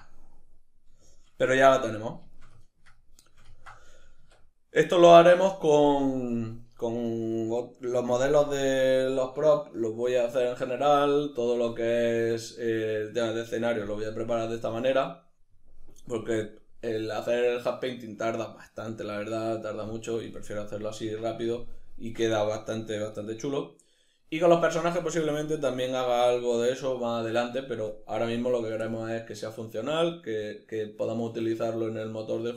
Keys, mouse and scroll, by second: 3.6 Tab.